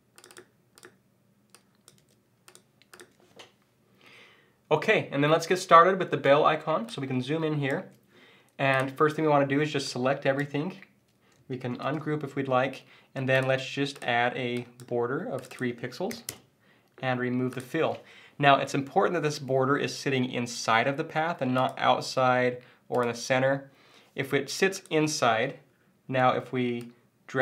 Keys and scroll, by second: 2.0 super+v, 11.8 shift+super+g.